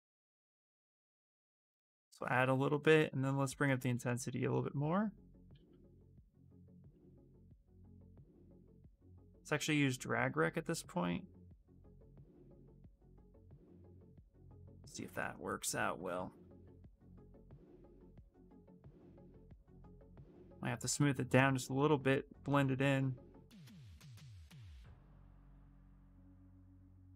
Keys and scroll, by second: 1.9 s, 2.6 space, 5.8 space, 8.8 ctrl+z, 14.4 ctrl+z, 15.8 ctrl+z, 16.3 ctrl+shift+z.